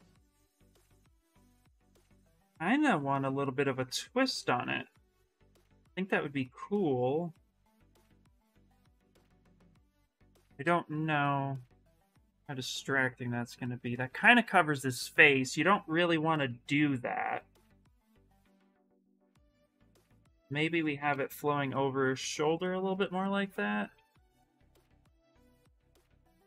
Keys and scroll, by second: 20.8 q, 23.7 w.